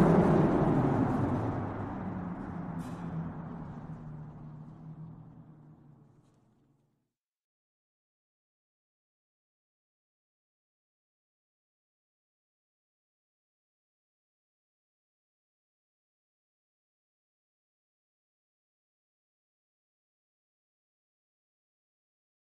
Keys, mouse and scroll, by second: 7.2 click, 9.1 click, 11.8 click, 12.8 click, 15.3 click, 17.0 click, 17.2 click, 20.4 Tab.